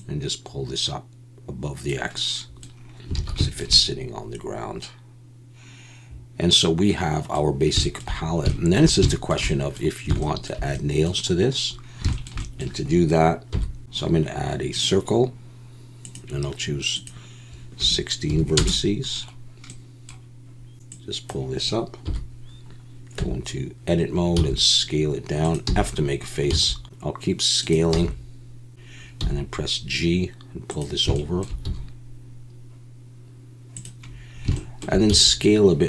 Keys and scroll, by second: 3.1 alt+a, 13.5 KP_7, 22.0 KP_7, 23.2 Tab, 24.4 s, 25.7 f, 26.5 s, 27.9 f, 29.2 g, 31.7 g, 35.1 s.